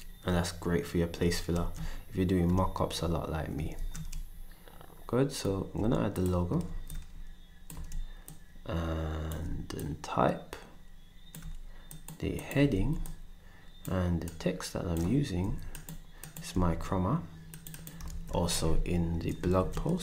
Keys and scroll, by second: 4.1 ctrl+shift+s, 7.7 d, 12.7 ctrl+d, 15.4 d, 16.5 s, 18.0 a, 19.8 m.